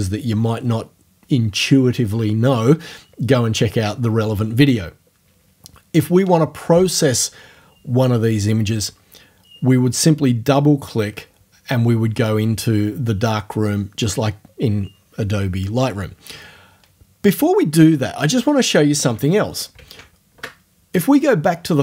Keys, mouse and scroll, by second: 19.8 alt+Tab.